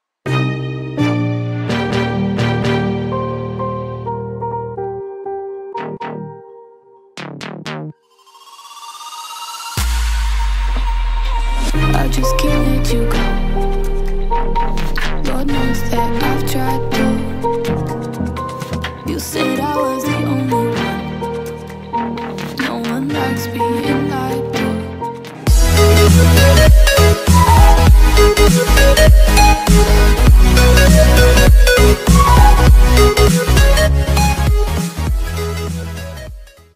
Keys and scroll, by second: 8.5 Up, 9.1 Up, 9.6 Up, 9.9-13.0 typing, 19.6 ctrl+alt+shift+e.